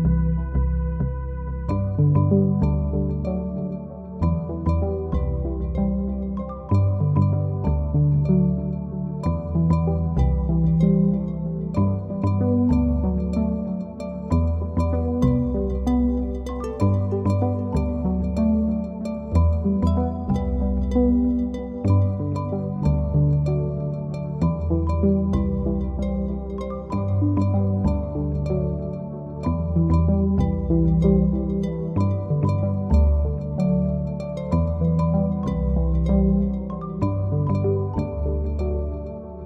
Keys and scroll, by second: 0.2 9, 0.4 Return, 1.1 Home, 3.5 typing, 27.7-28.7 typing.